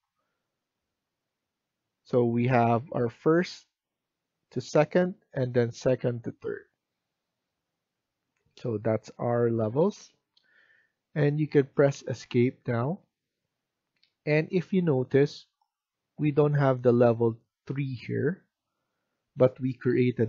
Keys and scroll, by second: 12.4 Escape.